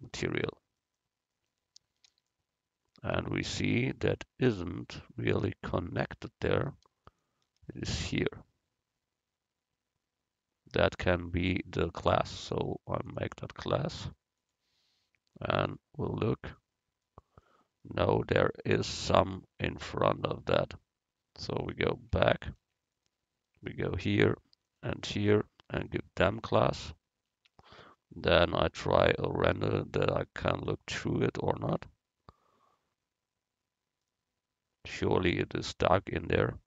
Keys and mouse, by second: 0.8-2.7 right drag, 2.7 middle click, 7.1-9.1 middle drag, 12.5-16.2 drag, 16.4-19.5 middle drag, 22.2 ctrl+z, 25.9-27.3 drag, 25.9 right click, 27.3 Tab, 27.9 click, 29.6-31.5 drag, 34.2-35.8 middle drag.